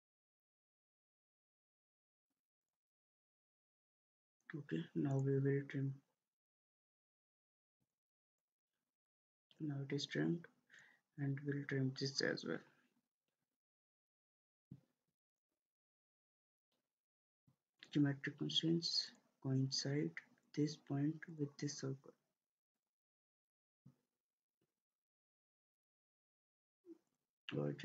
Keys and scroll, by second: 25.4 ctrl+z.